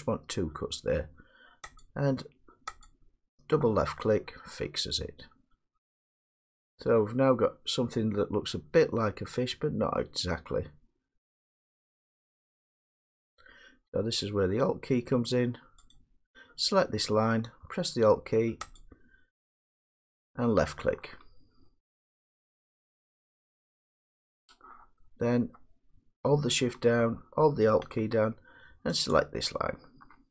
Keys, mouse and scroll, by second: 2.7 click, 2.9 click, 7.3 click, 12.4 middle click, 16.0 click, 18.8 alt+click, 22.0 middle click, 23.6 scroll up 2, 24.2 middle click, 25.6-25.9 scroll down 1, 26.2 scroll down 1, 27.1 middle click, 29.1 click.